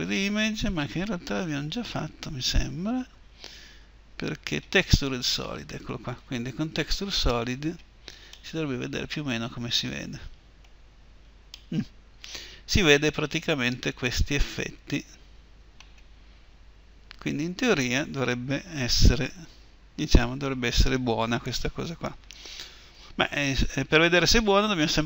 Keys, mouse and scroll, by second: 1.3-8.1 drag, 8.1-10.6 middle drag, 10.7-11.8 middle drag, 12.0 middle click, 12.2 middle click, 12.6 middle click, 16.3-18.8 middle drag, 22.7 Escape.